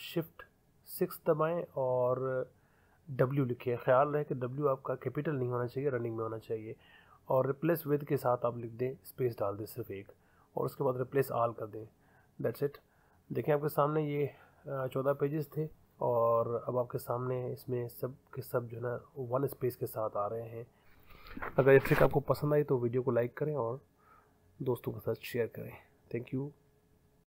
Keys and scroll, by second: 4.4 w, 10.0 space.